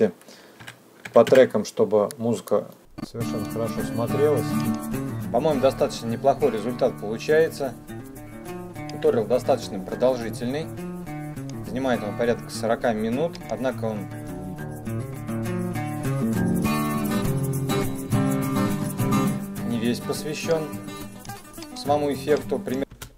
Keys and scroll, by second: 0.4 KP_Subtract, 1.0 KP_5, 2.8 KP_Enter, 3.2 space, 22.1 space.